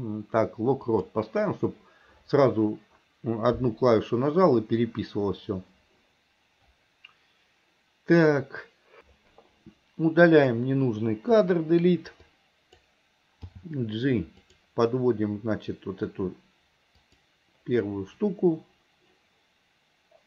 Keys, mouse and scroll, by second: 10.3 click, 11.4 Delete, 12.3-12.8 drag, 13.6 g, 17.1 click.